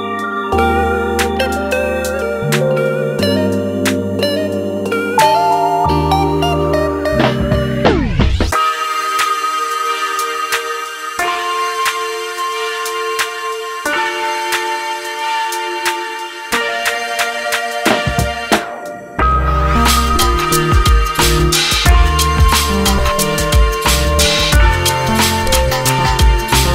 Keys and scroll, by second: 16.0 Delete.